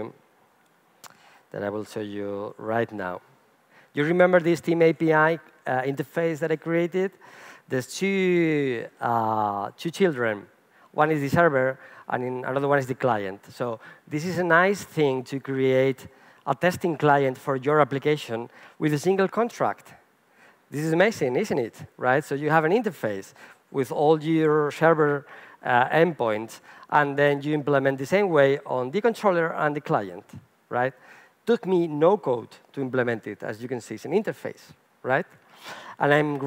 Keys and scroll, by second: 7.8 super+b.